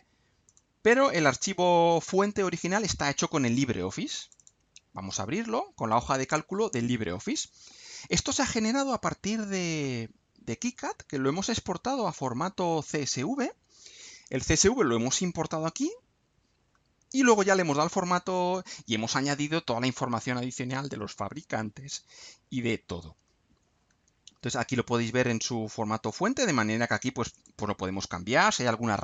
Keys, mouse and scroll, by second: 0.5 click, 4.2 click, 23.9-24.3 scroll down 2, 24.5 scroll down 2, 25.7 scroll down 2, 27.3 click, 28.3 click.